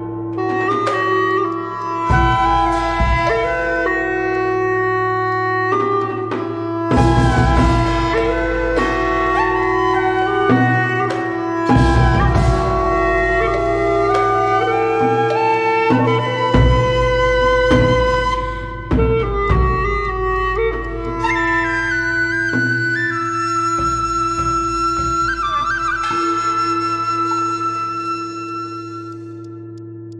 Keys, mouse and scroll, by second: 1.0 scroll down 1, 1.2 alt+middle click, 1.3 alt+click, 1.7 scroll up 1, 1.8 alt+click, 2.3 alt+click, 2.9 scroll up 1, 3.1 scroll down 1, 3.2 alt+click, 4.3 alt+click, 6.4 ctrl+z, 6.5 ctrl+z, 7.0 alt+click, 8.8 Tab, 9.2 alt+click, 10.2 alt+click, 10.9 Tab, 11.7 alt+click, 12.1 Tab, 12.5 alt+click, 13.0 Tab, 13.2 alt+click, 13.3 ctrl+z, 13.6 Tab, 13.9 alt+click, 14.7 ctrl+z, 14.8 ctrl+z, 16.0 Tab, 16.5 alt+click, 16.7 scroll down 1, 19.4 alt+click, 20.0 Tab, 20.5 Tab, 20.8 Tab, 21.0 Tab, 21.2 Tab, 21.6 Tab, 21.8 Tab, 22.7 Tab, 23.2 Tab, 23.4 Tab, 24.1 Tab, 24.3 Tab, 24.6 Tab, 25.1 Tab, 25.9 scroll up 1, 26.1 alt+middle click, 26.2 alt+click, 26.9 Tab, 27.3 alt+click, 27.7 alt+click, 28.5 alt+click, 29.1 Tab, 29.4 alt+click, 29.6 alt+scroll down 1, 29.9 alt+middle click.